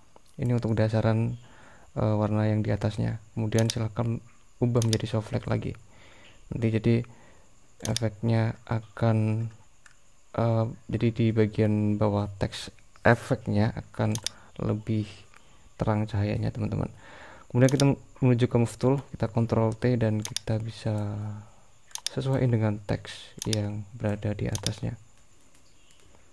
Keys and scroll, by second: 19.5 super+t.